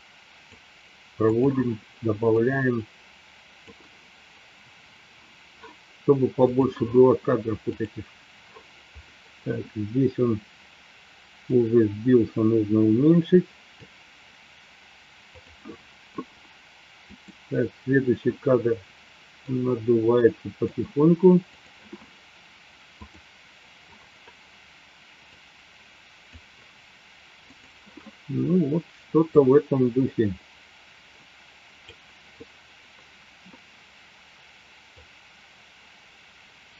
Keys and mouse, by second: 1.3 click, 2.8-3.8 drag, 7.9 click, 11.6-13.7 drag, 15.3 click, 17.3 click, 19.3-21.3 drag, 21.5 click, 23.2-23.7 drag, 25.3 click, 29.6-32.1 drag, 35.1-36.7 drag.